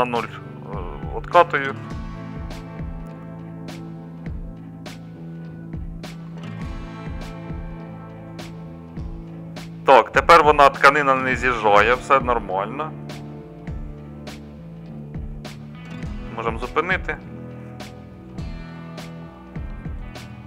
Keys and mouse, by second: 4.2-16.0 middle drag.